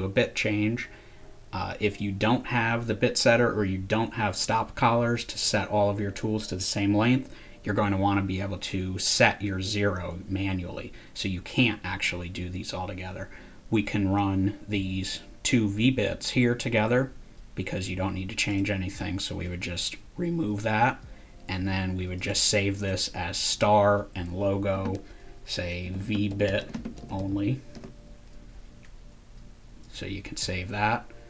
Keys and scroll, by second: 24.7-28.2 typing.